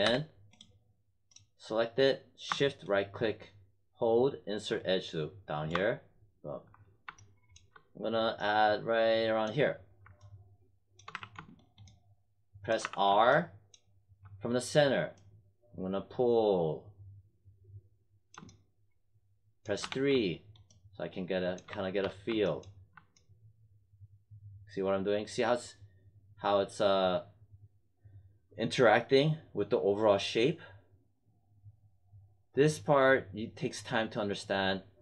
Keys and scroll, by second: 0.0 w, 11.0 w, 12.7 r, 19.8 3, 21.6 1, 21.9 3.